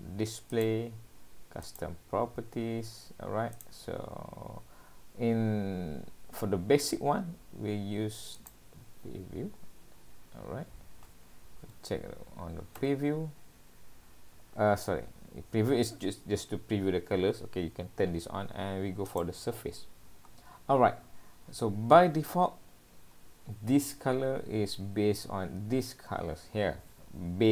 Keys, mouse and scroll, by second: 12.9-13.8 scroll down 5, 19.1 click, 19.8-20.8 scroll down 4, 22.7-23.4 scroll down 3.